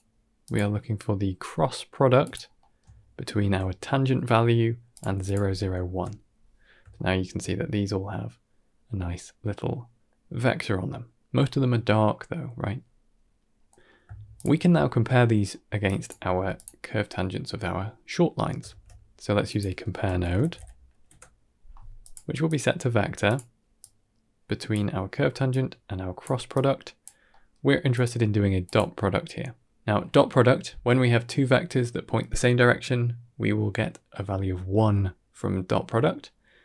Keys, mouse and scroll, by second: 0.3-2.2 drag, 2.5 middle click, 2.8-3.3 ctrl+middle drag, 4.8 click, 5.1 click, 6.6 scroll down 1, 6.8 shift+middle click, 13.4 scroll down 2, 13.5 middle click, 14.2 ctrl+shift+click, 15.4 middle click, 15.7 drag, 16.1 g, 18.5 shift+a, 22.3-23.2 drag, 23.7 click, 25.4-26.1 drag, 26.4 click, 27.2 middle drag, 27.8-28.6 drag, 30.7 middle click.